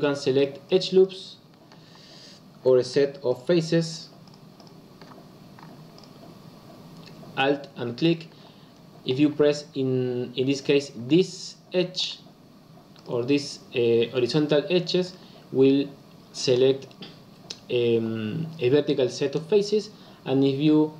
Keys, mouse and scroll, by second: 0.3 alt+click, 0.6 alt+click, 0.9 alt+click, 2.8 alt+click, 3.2 alt+click, 3.8 alt+click, 4.2 alt+click, 4.5 alt+click, 5.9 alt+click, 7.9 alt+click, 11.9 alt+click, 12.9 alt+click, 14.2 alt+click.